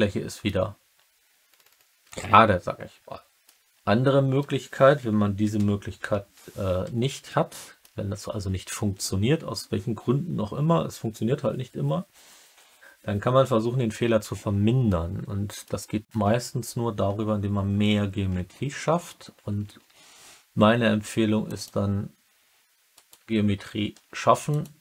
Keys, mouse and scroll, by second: 2.0 alt+click, 2.3 alt+middle click, 2.4 alt+click, 2.5 alt+middle click, 3.3 alt+click, 5.5 ctrl+u, 5.9 ctrl+z, 7.2 alt+middle click, 7.3 alt+click, 7.4 alt+middle click, 14.8 alt+middle click, 19.6 ctrl+r, 22.9 right click, 23.9 ctrl+r.